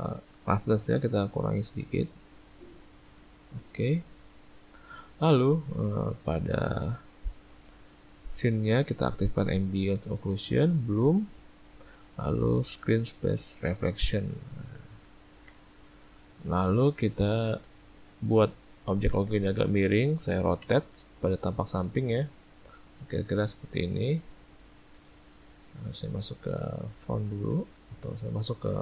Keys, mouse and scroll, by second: 1.2 click, 2.5 middle click, 5.8 click, 9.8 click, 10.9 click, 13.9 middle click, 15.1 ctrl+middle click, 15.3 middle click, 15.5 middle click, 16.5 middle click, 18.2 ctrl+middle click, 18.8 ctrl+middle click, 20.6 r, 25.3 middle click, 25.7 `, 27.9 z.